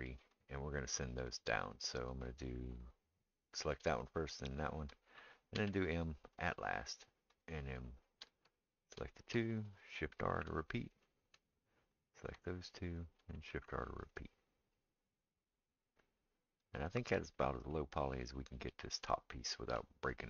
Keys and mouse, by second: 0.0 middle click, 0.3 click, 0.4-2.0 middle drag, 2.0 click, 2.1-4.4 middle drag, 4.4 shift+click, 4.6-7.4 shift+middle drag, 5.6 m, 7.4 click, 7.5-8.7 middle drag, 8.7 shift+click, 8.9-11.9 shift+middle drag, 10.3 shift+r, 11.9-13.0 drag, 13.0-20.2 shift+middle drag, 13.5 shift+r.